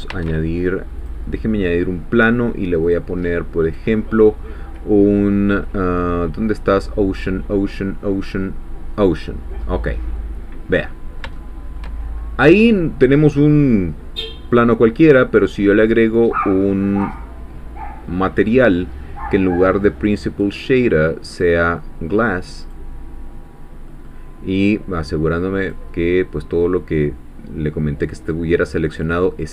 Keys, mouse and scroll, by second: 0.1 shift+a, 1.0 click, 2.8 click, 3.6 click, 8.9 click, 9.6 middle click, 10.4 scroll down 2, 10.7-11.9 middle drag, 12.2 shift+scroll up 3, 14.5 click, 15.3 click, 20.3 click, 21.3 click, 22.6 click, 23.5 scroll down 1, 23.9 middle click, 25.6 click, 28.2 click.